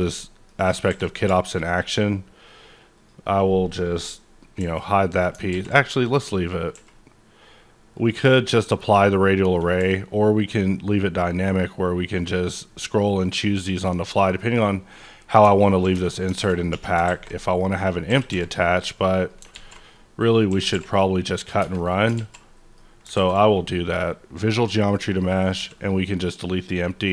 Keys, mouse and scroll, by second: 0.0 middle click, 0.9 a, 1.6-2.9 scroll down 1, 2.9 click, 4.6 h, 5.5 ctrl+z, 6.0 click, 6.1 ctrl+z, 6.7 h, 7.9 click, 8.3-9.7 scroll up 1, 9.7 q, 11.4 click, 11.9-12.6 scroll down 3, 12.6-13.1 scroll up 4, 13.1-13.5 scroll down 1, 13.5-14.3 scroll up 1, 14.3 right click, 14.5 scroll up 1, 14.7 scroll down 1, 14.9-16.4 middle drag, 15.9 Tab, 16.4 alt+a, 16.7 1, 17.0 alt+a, 17.4-19.1 drag, 18.1 g, 19.1 right click, 19.5 alt+z, 19.9-21.5 drag, 20.5-23.1 typing, 21.5 click, 21.6 Tab, 21.7-22.1 scroll down 2, 22.3-23.9 middle drag, 23.9 click, 25.1 click, 25.5 x, 25.7 click, 26.4 scroll up 1, 26.5-27.1 middle drag.